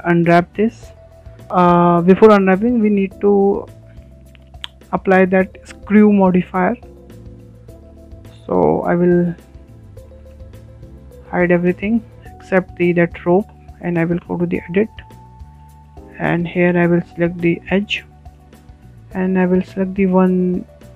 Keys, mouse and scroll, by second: 3.6 click, 5.4 click, 6.1-6.5 scroll down 3, 6.5-8.9 shift+middle drag, 8.9 shift+h, 10.0-10.3 scroll up 4, 10.3-13.0 shift+middle drag, 13.0 Tab, 13.5-13.9 shift+middle drag, 13.9-14.4 scroll up 7, 14.4-16.4 shift+middle drag, 16.4 2, 16.9-19.1 shift+middle drag, 19.1 click, 19.2 click, 19.7 scroll down 4, 20.0-20.9 middle drag.